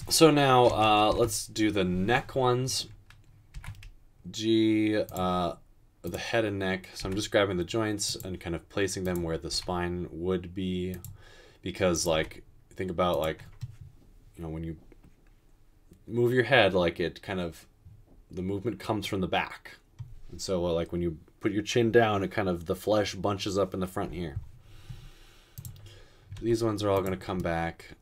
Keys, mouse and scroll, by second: 0.9-1.3 typing, 3.5 typing, 7.0 typing, 9.5 typing, 12.1 typing, 26.4 typing.